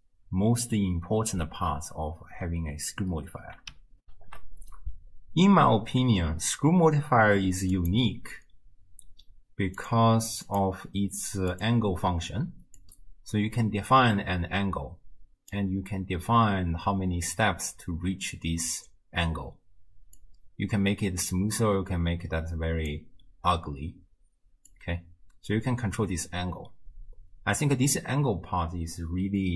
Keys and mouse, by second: 4.1 ctrl+alt+shift+q, 9.8 click, 11.6 click, 12.8-15.6 drag, 20.2-23.0 drag, 24.7-29.5 drag.